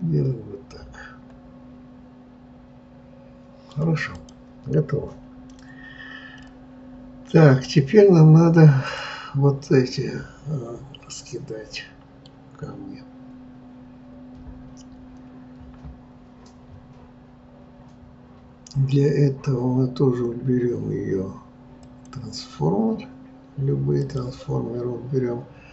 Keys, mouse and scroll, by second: 4.0 click, 6.4-8.9 middle drag, 8.9 click, 10.0-14.6 middle drag, 21.8-23.9 drag.